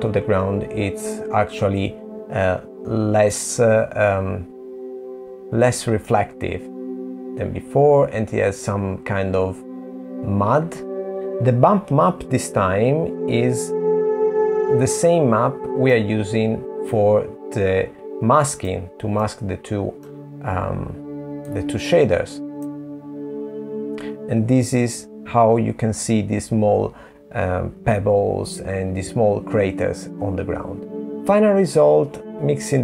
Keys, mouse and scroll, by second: 6.5 middle click, 11.1 middle click, 11.1 click, 13.2 middle click, 15.6 click, 25.0 middle click, 29.0 click, 31.6 middle click.